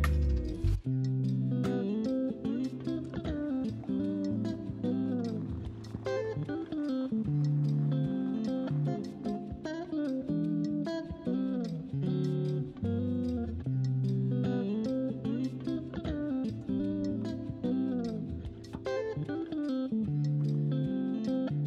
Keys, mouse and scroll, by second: 0.8 alt+click, 5.2-8.2 s, 8.5 Tab, 9.5 Tab, 9.8 s, 10.3 s, 10.4 s, 10.5 Tab, 14.6 Tab, 16.1 alt+click, 16.7 g, 19.0 Tab, 20.3 scroll down 2, 20.5-21.6 middle drag.